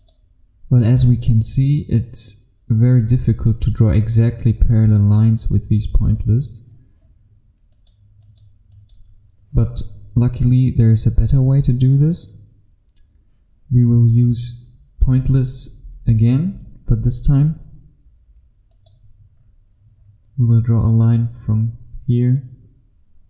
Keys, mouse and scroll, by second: 15.5-18.7 scroll up 1, 18.7 click, 19.6-21.5 scroll down 1, 21.5-23.2 scroll up 1.